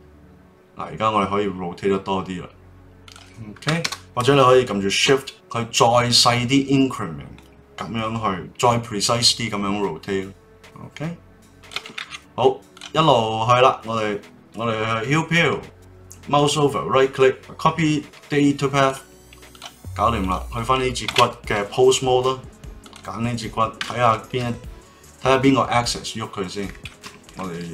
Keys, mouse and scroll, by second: 3.0-7.6 drag, 12.0 ctrl+z, 12.7 click, 16.3-19.5 right drag, 19.5 click, 20.2 click, 21.0 ctrl+Tab, 22.8 click, 23.8 KP_3, 24.4 r.